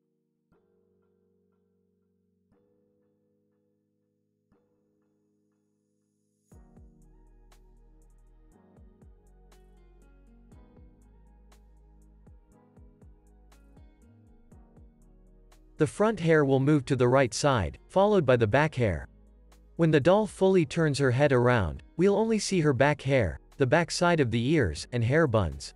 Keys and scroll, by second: 3.4 space, 3.7 super+s, 4.2 z, 6.4 z, 7.6 x, 9.1 super+s, 16.0 p, 17.6 z, 20.0 x, 21.2 x.